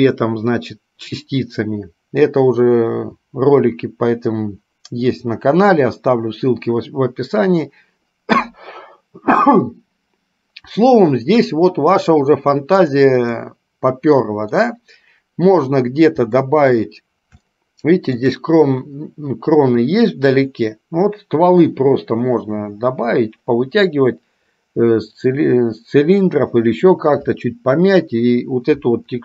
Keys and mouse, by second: 13.0 click, 13.7-15.0 middle drag, 16.8-17.2 middle drag, 17.7-18.6 shift+middle drag.